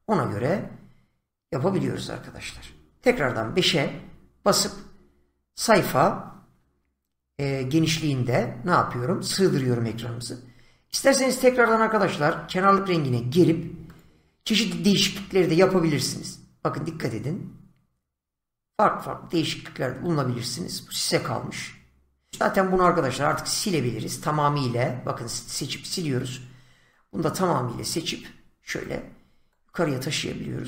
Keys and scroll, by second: 3.0 5, 25.2 Delete.